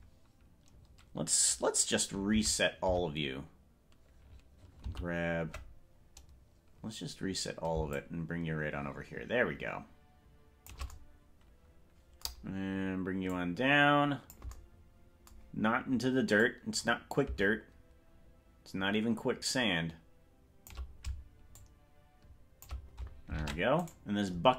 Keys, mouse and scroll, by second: 2.6 alt+r, 3.0 alt+r, 5.0 alt+g, 7.9-10.8 shift+drag, 13.3-14.4 drag, 16.4-20.8 drag, 21.6-22.7 shift+drag, 23.6 ctrl+Tab, 24.0 right click.